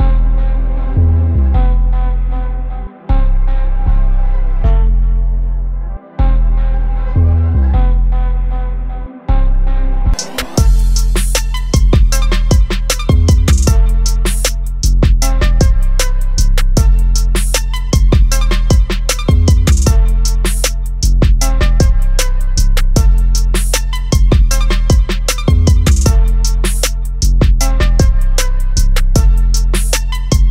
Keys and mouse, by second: 0.7 click, 4.9 click, 10.5 click, 13.3 click, 16.7 click, 19.1 click, 24.7 click, 27.5 click.